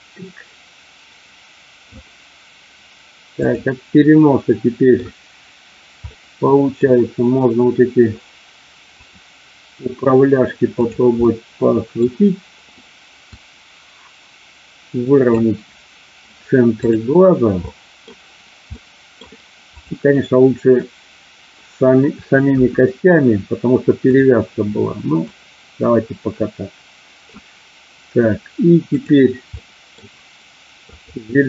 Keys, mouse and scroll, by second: 3.4 click, 4.4 middle click, 6.0 middle click, 9.0 click, 11.3 middle click, 13.4-15.4 drag, 16.8 click, 17.6 middle click, 18.8 middle click, 22.5 KP_1, 24.0 click, 25.3-27.3 drag, 28.8 click, 29.5 middle click, 30.9 click.